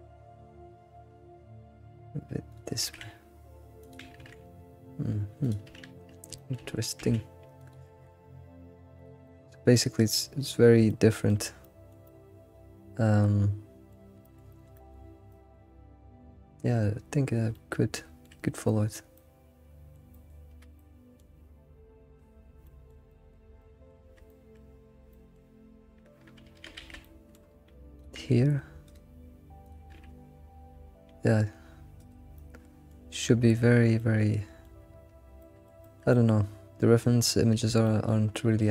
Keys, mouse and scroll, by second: 0.7 g, 2.8 s, 3.4 g, 3.8 s, 4.2 g, 6.3 shift+middle click, 6.6-7.0 scroll up 2, 7.0 s, 8.0 g, 9.2-14.4 shift+middle drag, 10.2 g, 10.4-10.9 scroll down 1, 14.4 scroll up 4, 14.7 shift+middle click, 15.0-15.8 scroll up 5, 15.3 shift+middle click, 17.3 scroll up 1, 17.5-18.5 shift+middle drag, 18.5-19.1 scroll up 2, 19.1 middle click, 20.7-26.4 shift+middle drag, 27.0 shift+middle click, 27.4-28.0 scroll up 4, 28.0 ctrl+g, 30.0 g, 32.3-33.5 shift+middle drag, 33.5-34.0 scroll down 6, 34.0-35.5 middle drag, 35.6-38.7 middle drag, 35.8 g.